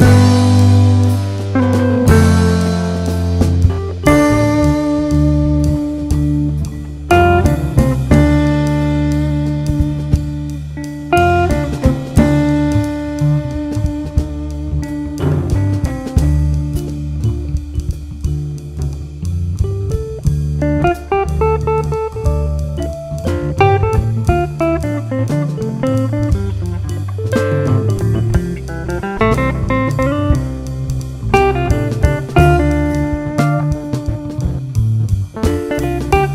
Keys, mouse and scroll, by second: 0.2-0.5 scroll up 1, 0.5 click, 0.8 KP_Decimal, 1.1 scroll down 1, 2.0 alt+a, 2.4 k, 5.0 click, 5.5 g, 6.1-6.4 scroll down 1, 6.4 `, 6.8 scroll up 1, 7.2 scroll down 1, 7.4 alt+a, 7.7 `, 9.6 scroll down 1, 9.8 `, 11.7 ctrl+r, 12.4 `, 13.5-14.0 scroll up 1, 14.0 ctrl+r, 15.1 `, 15.6-16.1 scroll down 1, 16.1 3, 16.3 click, 16.9 x, 17.2 scroll down 1, 18.2 scroll down 1, 18.6-19.4 scroll up 2, 21.0 2, 21.4 alt+click, 27.0 alt+a, 27.9 ctrl+r, 29.4 click, 29.8 right click, 30.1 ctrl+r, 30.5-31.4 scroll down 2, 31.4 ctrl+r, 33.0-33.6 scroll up 2, 34.3 alt+a, 34.4 click, 35.1-36.3 right drag, 35.8 ctrl+r.